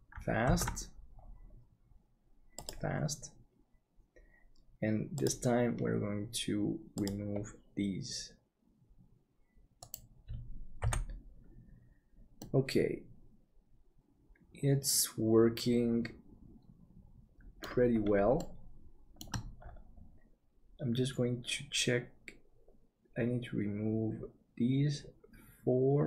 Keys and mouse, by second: 0.6 ctrl+s, 3.7-9.8 drag, 9.8-10.8 right drag, 10.8 h, 12.4-17.6 middle drag, 18.3 shift+middle click.